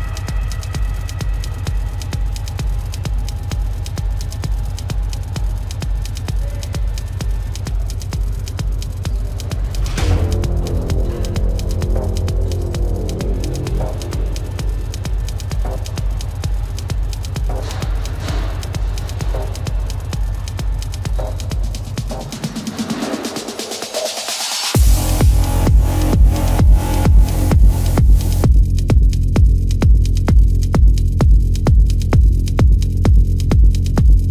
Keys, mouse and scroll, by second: 5.4 space, 11.1 right click, 23.2 ctrl+alt+z, 26.8 right click.